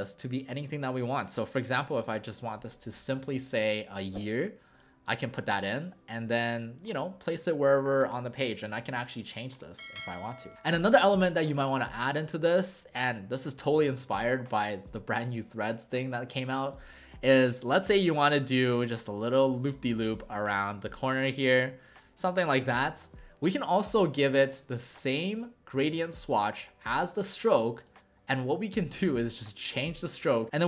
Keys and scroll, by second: 3.7 typing.